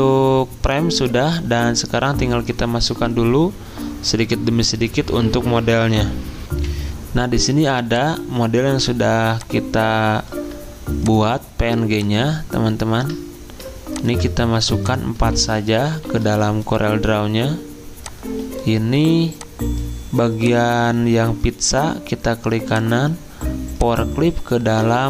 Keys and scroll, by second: 6.5 F10, 6.5 F10, 15.2 alt+Tab, 16.1 alt+Tab.